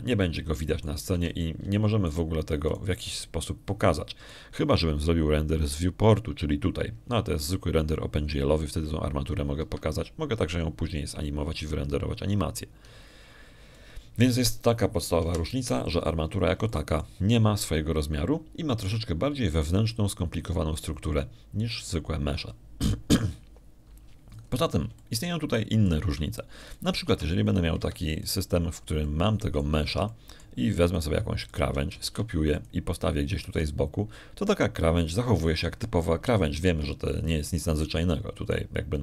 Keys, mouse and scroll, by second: 0.5 Escape, 2.1 click, 3.0 x, 3.1 click, 3.6 shift+click, 4.5 shift+right click, 4.9 shift+middle click, 5.5 click, 7.6 click, 11.5 Escape, 15.6 click, 17.1 1, 18.2 middle click, 18.5 shift+click, 23.6 right click, 26.3 middle click, 26.9 shift+click, 27.1 shift+middle click, 28.1 shift+scroll down 2, 28.6 right click, 28.9 Tab, 29.7 Escape, 30.1 click, 30.7 middle click, 30.7 click, 31.7 Tab, 31.9 click, 32.8 shift+right click, 33.3 shift+right click, 33.9 shift+d, 34.4 shift+click, 35.3 shift+r, 38.5 Escape.